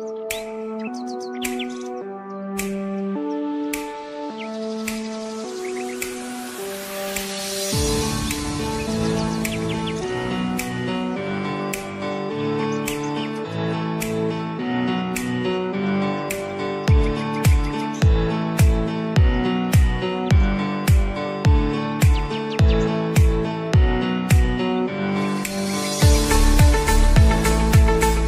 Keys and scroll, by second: 11.9 v.